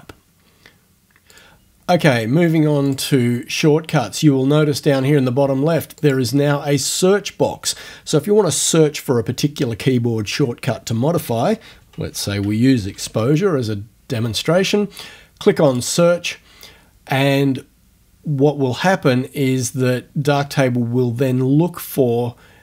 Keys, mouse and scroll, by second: 2.9 click, 5.9 middle click, 6.0 click, 6.3-10.9 middle drag, 11.5-13.5 typing, 15.7 click.